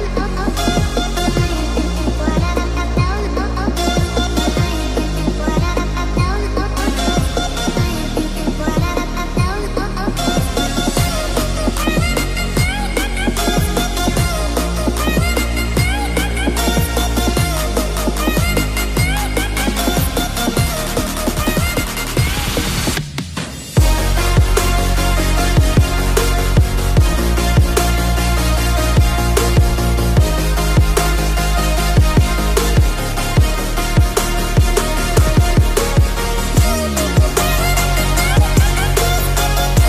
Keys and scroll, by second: 11.2 ctrl+t, 27.8 ctrl+space.